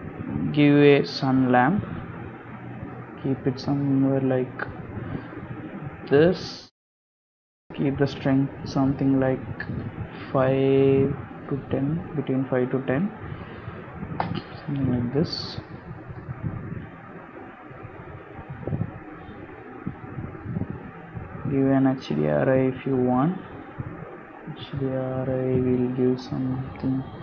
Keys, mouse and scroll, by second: 0.7 click, 1.5 click, 2.4 g, 3.7 KP_7, 4.4 r, 6.6 g, 7.7 click, 10.2 click, 14.8 g, 16.2 click, 18.7 scroll down 2, 19.1 scroll up 1, 19.3 shift+middle click, 19.7 scroll up 1, 21.6 click, 22.3 click.